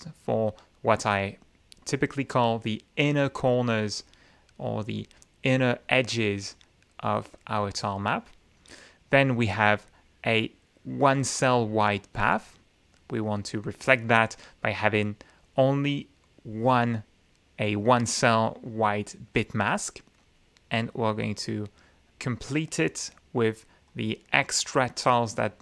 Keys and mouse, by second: 1.8-3.5 drag, 3.9-5.1 drag, 5.4-6.0 drag, 8.4-9.4 drag, 9.7-11.1 drag, 11.4-13.1 drag, 20.2-21.2 drag, 21.5-22.9 drag, 23.0 click, 23.5 right click, 24.9-25.6 drag.